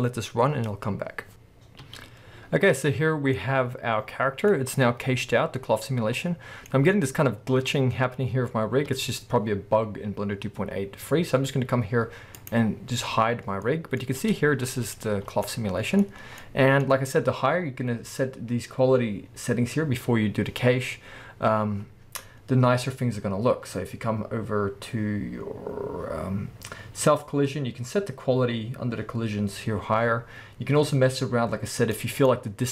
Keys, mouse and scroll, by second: 1.3-12.4 middle drag, 1.3-1.8 scroll up 2, 1.8 space, 3.2 scroll down 2, 4.7-6.2 scroll up 2, 8.9 space, 12.4 click, 12.5-14.3 middle drag, 14.2 space, 14.3 space, 15.4-23.4 middle drag, 15.4 scroll down 2, 16.1 scroll up 2, 18.5-21.8 scroll down 4, 21.8 scroll up 2, 22.9-23.4 scroll up 4, 23.7 scroll up 2, 25.0-25.8 scroll down 4, 25.7 middle click, 27.0 scroll down 2, 30.8-31.4 scroll up 4, 32.0 middle click, 32.3 scroll up 2.